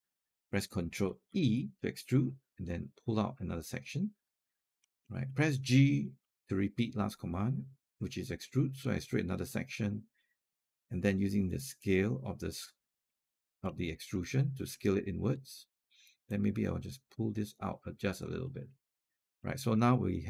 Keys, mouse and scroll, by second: 1.1 ctrl+e, 2.5-4.7 drag, 4.9 alt+middle click, 6.0 g, 8.0-10.1 drag, 11.6 click, 13.1 alt+click, 13.5 alt+middle click, 13.9-14.4 scroll up 1, 14.5 scroll down 1, 16.1-18.0 drag, 18.3 alt+click, 18.8 alt+click, 19.2 alt+middle click, 19.5 alt+click.